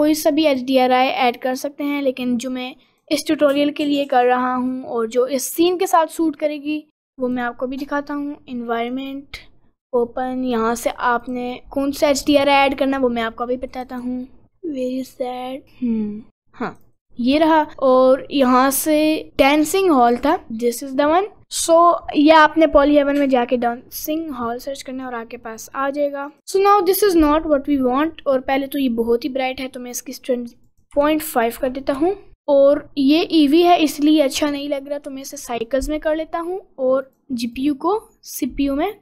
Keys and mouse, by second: 2.8 click, 4.3 click, 7.4-9.1 drag, 9.1 click, 10.5 click, 23.8 middle click, 24.6 middle click, 26.3 click, 29.9-31.3 drag, 33.7-34.8 drag, 36.4 click, 37.6-39.0 drag.